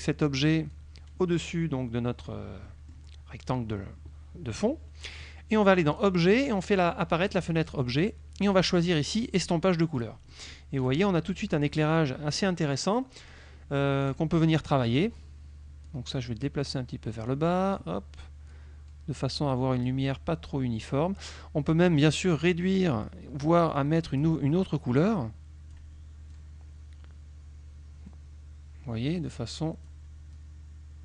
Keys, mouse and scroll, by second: 0.8-2.5 drag, 2.8 click, 6.0 click, 7.3 click, 8.5 click, 9.5 click, 10.0 click, 10.9 click, 11.6 click, 14.1 click, 14.7 click, 15.9-17.0 drag, 17.4 click, 18.6-20.1 drag, 22.1 click, 23.8 click, 25.1 click, 26.4-30.1 drag, 30.4-31.0 drag.